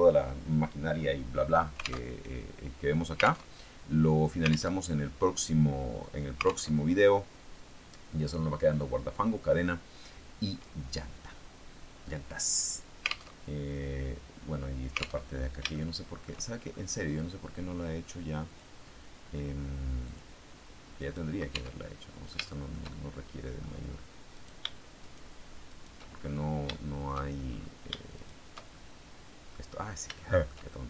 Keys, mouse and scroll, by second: 1.9 alt+Tab, 3.1 alt+Tab, 4.6 alt+Tab, 6.3 alt+Tab, 13.1 alt+Tab, 15.1 alt+Tab, 15.6 shift+middle click, 18.4 click, 19.9 click, 20.9 right click, 21.4 Tab, 21.7-23.7 middle drag, 24.2 right click, 25.0 shift+right click, 25.6 shift+right click, 26.6 shift+middle click, 28.0 shift+right click, 28.6-29.6 shift+middle drag, 29.8 middle click, 30.1-30.8 shift+middle drag.